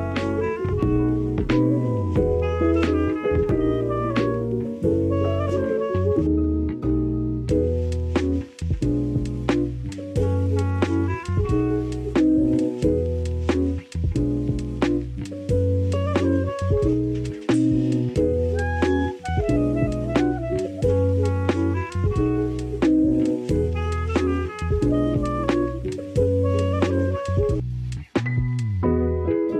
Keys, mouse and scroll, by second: 0.4 click, 0.8 r, 1.2-2.3 drag, 2.3 s, 2.9 click, 3.3 g, 4.7 click, 5.4 r, 5.7 click, 6.5 e, 7.3 s, 8.1 middle click, 9.8 KP_7, 10.7 shift+middle click, 12.8 click, 13.3 click, 13.5 click, 14.4 s, 15.1 t, 16.5 click, 17.3 t, 21.2 y, 21.2 KP_1, 23.0 ctrl+z, 23.1 ctrl+z, 23.3 ctrl+z, 24.1 KP_7, 25.0 s.